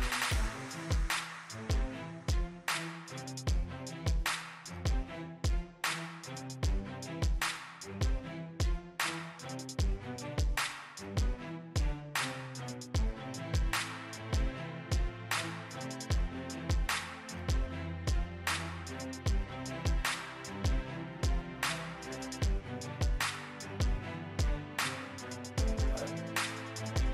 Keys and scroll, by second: 21.9 ctrl+d.